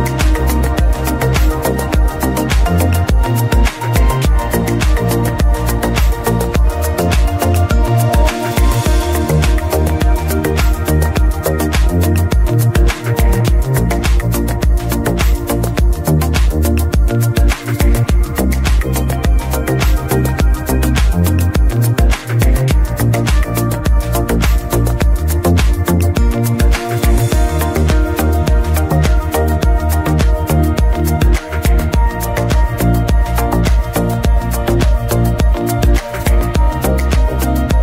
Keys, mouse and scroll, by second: 0.9 click, 1.0 KP_Enter, 2.0-2.9 scroll down 2, 2.9 scroll down 1, 3.2 click, 4.1 KP_Enter, 4.9-5.2 scroll up 1, 5.8-6.1 scroll down 1, 6.1 ctrl+s, 6.5-6.8 scroll down 1, 7.0-7.3 middle drag, 7.3-7.9 scroll up 1, 7.9 scroll down 1, 8.4 middle click, 8.5-9.4 scroll up 1, 9.4 click, 10.5 click, 19.2 scroll down 1, 19.7 middle drag, 19.9-20.4 scroll up 1, 20.5 alt+a, 20.8 scroll down 1, 21.0-21.7 middle drag, 21.7 click, 28.3 ctrl+shift+click, 30.5-30.9 scroll down 1, 34.4-37.4 drag, 37.7-37.8 scroll down 1.